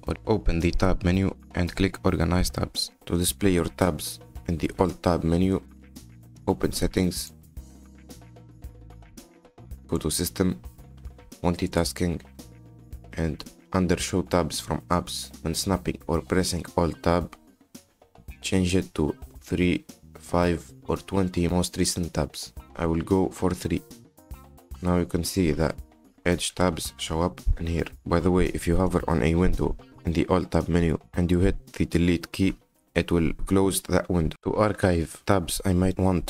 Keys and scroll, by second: 5.3 alt+Tab, 6.1 Escape, 31.6 alt+Delete.